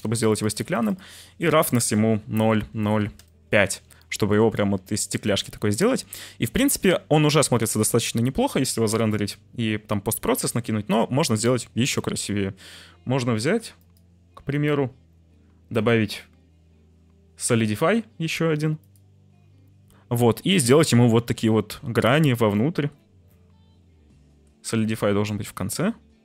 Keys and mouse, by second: 0.3 click, 0.8-3.1 drag, 11.8 click, 13.7 click, 15.8-19.0 drag, 20.8 shift+middle click, 22.0 shift+click, 25.3 shift+click, 25.9 shift+middle click.